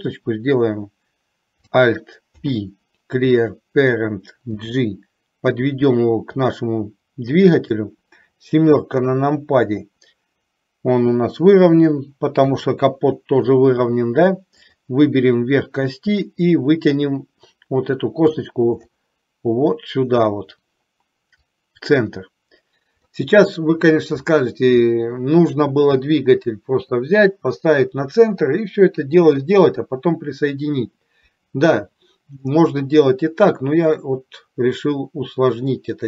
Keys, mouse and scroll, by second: 2.4 alt+p, 4.6 g, 9.0 KP_7, 12.5 KP_3, 16.2-18.4 drag, 21.7-24.4 drag, 32.7-36.0 middle drag.